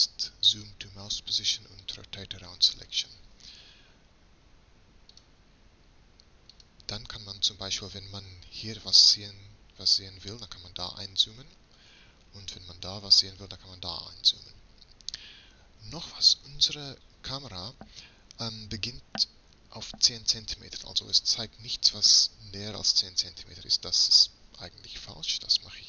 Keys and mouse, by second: 16.0-24.0 middle drag, 24.0-25.8 drag.